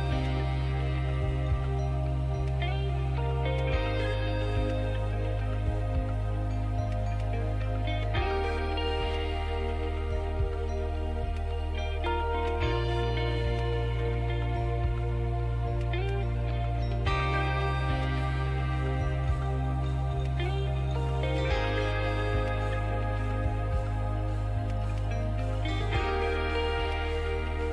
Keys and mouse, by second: 0.4 s, 2.4 e, 3.6 s, 4.6 f, 5.3 a, 5.5 a, 7.5 w, 10.4 Tab, 13.9 Tab, 15.3 ctrl+n, 15.8 Tab, 16.8 Tab, 18.0 ctrl+e, 20.4 Tab, 22.0 KP_Divide, 23.2 Tab.